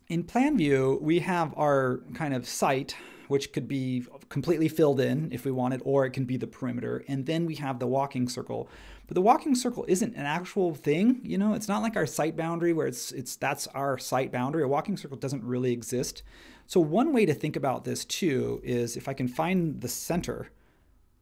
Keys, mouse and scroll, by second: 20.1 l.